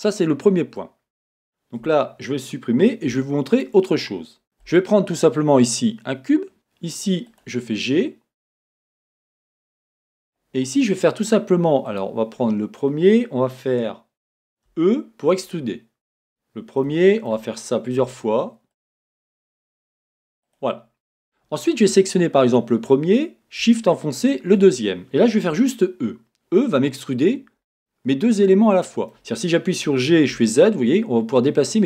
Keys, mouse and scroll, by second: 1.9 Tab, 3.1-7.4 middle drag, 3.1 x, 4.4 shift+a, 5.4-6.5 scroll, 6.5 g, 7.4 click, 7.9-11.9 middle drag, 9.1 Tab, 11.9 click, 14.7 e, 16.1 click, 16.8-18.8 shift+middle drag, 18.0 e, 19.0 e, 19.7 click, 19.9 e, 20.5 click, 24.2 shift+click, 27.3 e, 27.7 click, 27.7-29.9 middle drag, 29.9 g.